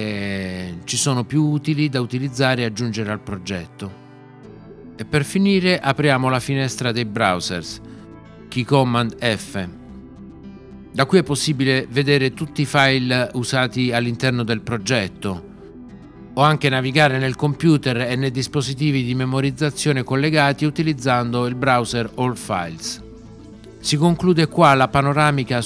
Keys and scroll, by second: 8.9 f.